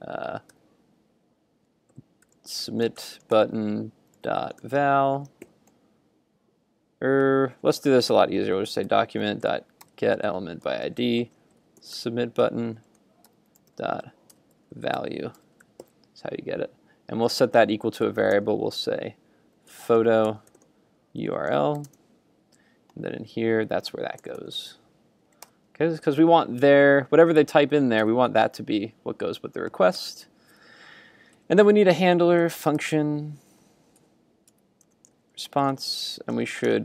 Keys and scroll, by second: 28.0 super+Tab.